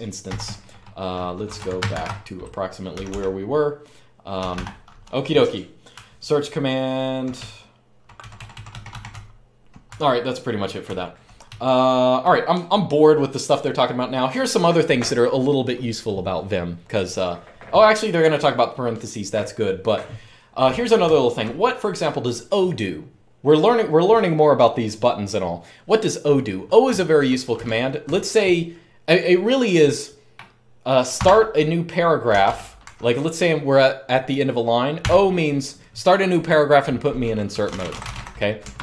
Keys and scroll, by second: 0.0-2.8 typing, 4.1 typing, 5.7-11.7 typing, 20.8-21.2 k, 26.6-27.8 typing, 30.9 o, 32.2 Escape, 32.2-33.1 typing, 34.7 o, 37.0-38.4 typing, 38.5 Escape.